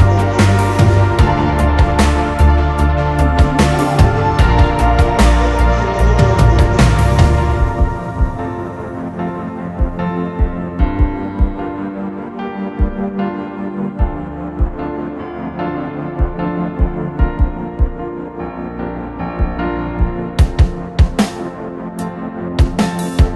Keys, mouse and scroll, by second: 0.0-1.2 typing, 2.3 typing, 4.1-9.3 typing, 9.4 middle click, 9.9-11.1 scroll down 2, 10.4 t, 11.1 scroll down 1, 11.9 r, 14.3-20.9 typing, 17.9 Escape, 21.6 ctrl+z, 22.8 Delete.